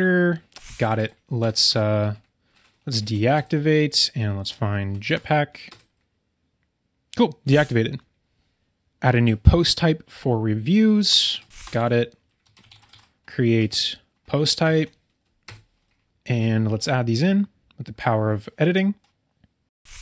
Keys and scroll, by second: 1.4 BackSpace, 3.0 Down, 11.5 BackSpace, 14.6 Down.